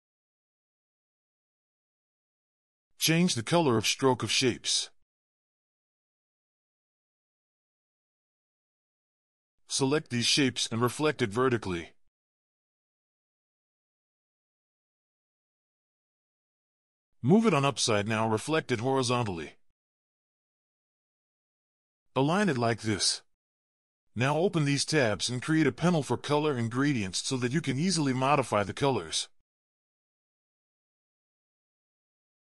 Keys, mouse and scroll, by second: 0.1 a, 0.3-0.8 alt+scroll up 1, 0.8 double click, 1.1 alt+scroll down 1, 1.2-2.3 ctrl+scroll up 8, 2.3 v, 12.0 right click, 17.5 ctrl+scroll up 3, 17.7-18.3 alt+scroll down 4, 18.3 right click, 21.0 alt+scroll up 1, 22.2-22.5 alt+scroll up 1, 22.6 alt+scroll down 1, 22.7 ctrl+scroll up 2, 25.1 shift+click, 25.7 scroll down 1.